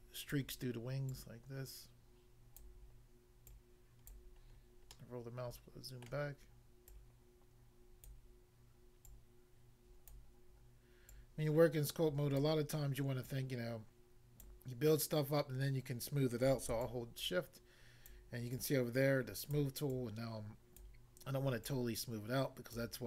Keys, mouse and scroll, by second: 0.4 click, 1.1 click, 2.6 click, 3.4 click, 4.1 click, 4.4 scroll down 1, 5.0 middle click, 6.0 middle click, 6.9 click, 8.1 click, 9.1 click, 10.2 click, 11.0 click, 12.4 click, 13.2 click, 14.4 click, 16.8 shift+click, 18.5 shift+click, 19.9 shift+click, 21.7 shift+click.